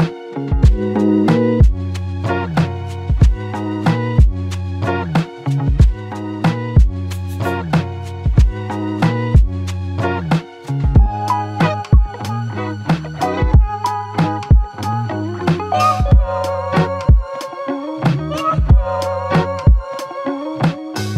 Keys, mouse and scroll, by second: 7.7 double click, 10.3 typing, 11.7 ctrl+click, 13.5 shift+click, 19.3 double click, 21.0 ctrl+click.